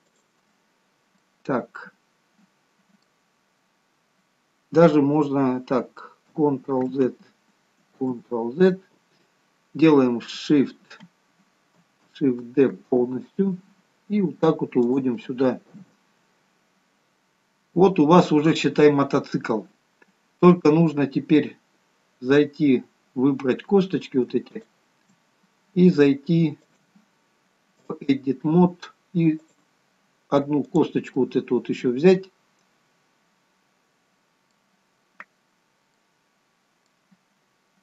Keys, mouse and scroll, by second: 1.1-2.6 scroll down 2, 1.5 middle click, 7.0 ctrl+z, 8.3 ctrl+z, 13.1 shift+d, 15.9 KP_3, 17.4-19.0 scroll up 1, 19.0-20.7 scroll up 1, 21.6 click, 24.7 shift+click, 26.8 click, 31.4 middle click, 36.2 middle click.